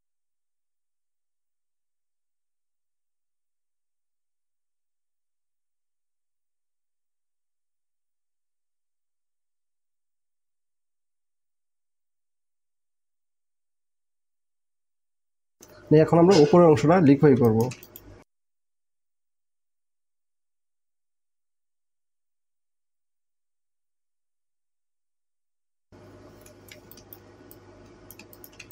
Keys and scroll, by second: 1.2 space, 2.7 alt+space, 3.9 alt+space, 5.4 space, 8.2 space, 9.0 alt+space, 11.1 typing, 14.8 space, 17.6 space, 28.2 space.